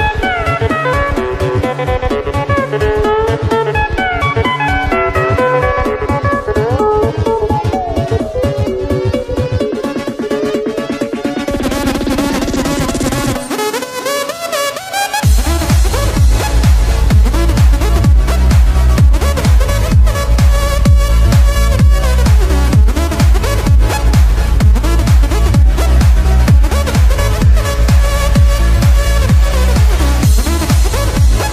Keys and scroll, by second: 0.3 space, 1.8 space, 3.2 space, 4.5 space, 6.4 space, 7.3 space, 9.8 space, 10.6 space, 12.1 space, 13.3 space, 15.7 ctrl+-, 18.4 ctrl+=, 18.6 space, 19.2 ctrl+=, 24.3 space, 27.9 ctrl+-, 28.4 space, 28.6 ctrl+=, 31.2 space.